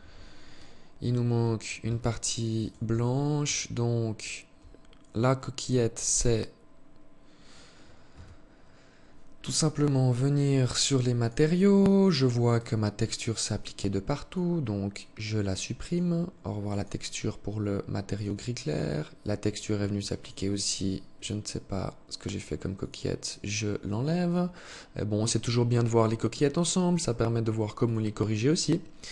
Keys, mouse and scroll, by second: 0.4 scroll up 3, 1.0 Tab, 1.7 right click, 2.0 Tab, 2.6 alt+click, 5.1 right click, 7.2 a, 9.4 click, 10.3 click, 11.6 click, 13.4 click, 15.0 click, 15.8 click, 17.2 click, 19.4 click, 20.3 click, 23.4 click, 26.9 click, 27.3 click, 28.5 click.